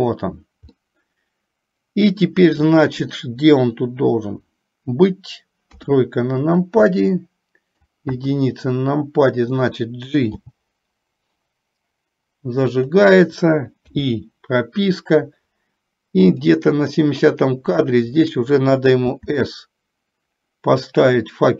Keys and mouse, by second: 0.9-2.5 middle drag, 3.1 middle click, 5.9 KP_3, 7.1-8.1 middle drag, 8.4 KP_1, 10.5 g, 14.1 i, 16.6 click, 19.5 s.